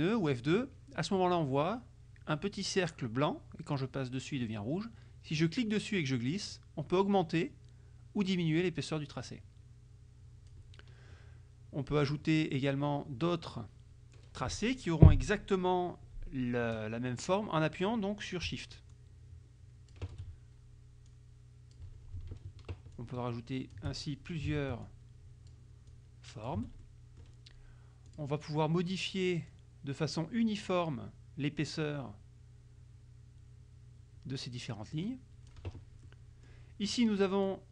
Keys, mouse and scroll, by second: 0.0 click, 5.5-10.7 drag, 12.1 click, 19.0-20.2 shift+drag, 21.2 click, 23.0 shift+click, 24.1 shift+middle click, 25.0 shift+click, 26.0 shift+click, 27.0 shift+middle click, 28.2 click, 29.6-35.8 drag, 36.2 middle click.